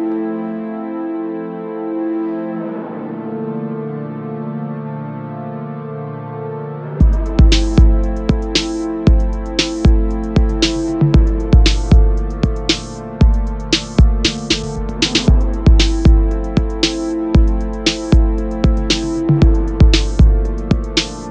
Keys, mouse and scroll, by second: 2.9 s, 7.7 g, 11.6 s, 15.1 s, 17.7 click, 18.0 right click, 18.7 scroll up 2, 19.2-19.6 middle drag, 19.6 click, 19.9-21.3 middle drag.